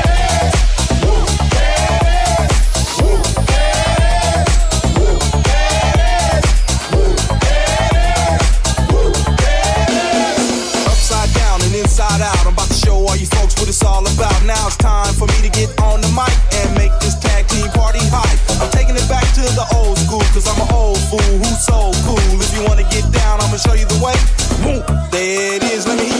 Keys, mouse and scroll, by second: 1.7 middle click, 1.7 right click, 2.1 middle click, 2.1 right click, 5.1 middle click, 5.1 right click, 6.9 middle click, 6.9 right click, 10.1 middle click, 10.1 right click, 12.0-13.3 shift+middle drag, 12.0 r, 12.0 g, 13.3 right click, 13.4-21.0 ctrl+middle drag, 19.0 click, 21.0-23.6 drag, 22.3 Tab, 23.2 alt+z, 23.6 alt+z, 24.3 shift+z, 25.4 z.